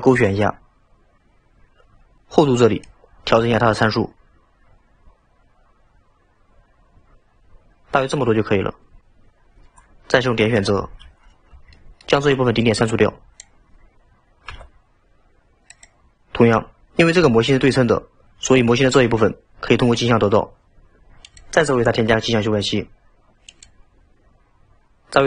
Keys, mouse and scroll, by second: 0.1 click, 1.0-2.2 scroll down 1, 2.9-5.9 drag, 10.8 1, 11.2-11.7 scroll down 2, 11.7-12.6 shift+middle drag, 12.6 click, 14.6 x, 21.3-24.3 drag.